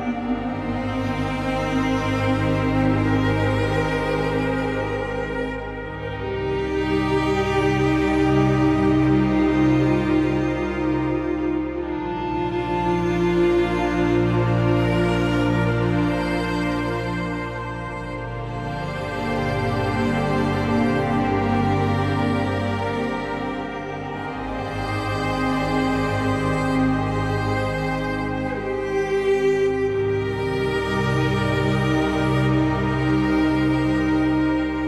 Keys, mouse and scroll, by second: 0.6-1.7 scroll up 1, 1.7-2.4 scroll down 3, 2.4 middle click, 3.2 scroll down 2, 3.4-4.9 middle drag, 6.2 click, 7.7 click, 9.2 click, 11.2-13.2 drag, 14.0 scroll down 1, 27.0-28.1 drag, 28.1 middle click, 28.5-30.0 drag, 32.0 click.